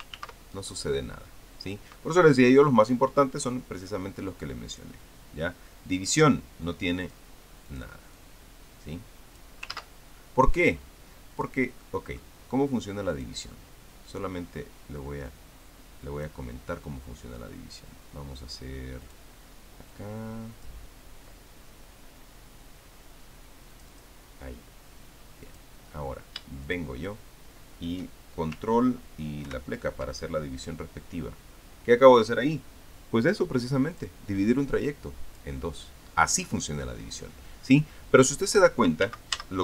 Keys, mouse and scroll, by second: 1.0 ctrl+z, 5.5 click, 7.9 click, 8.5-10.4 drag, 10.6 ctrl+z, 11.2 click, 12.6 middle click, 13.0-13.6 scroll up 2, 13.9 click, 14.4-16.0 drag, 16.1-17.4 drag, 19.8 click, 20.7 click, 24.5 click, 26.2 click, 27.4 shift+click, 34.8 click, 35.7 click, 38.6-39.5 drag.